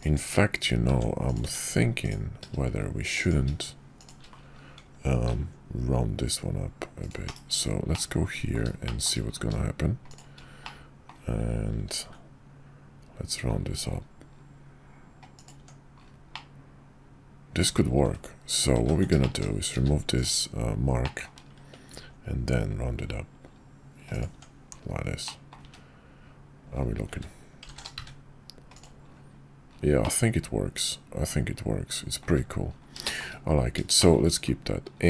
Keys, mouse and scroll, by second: 0.2 Tab, 5.3 ctrl+b, 7.3 /, 7.9 click, 8.8 shift+click, 10.6 middle click, 11.9 ctrl+b, 15.6 Tab, 16.3-17.6 middle drag, 18.4 ctrl+z, 19.2 shift+click, 19.7 q, 21.0 click, 21.9 ctrl+b, 24.3 Tab, 25.3 drag, 30.0-32.2 middle drag, 32.2 `, 33.0 shift+middle click, 34.0 shift+middle click.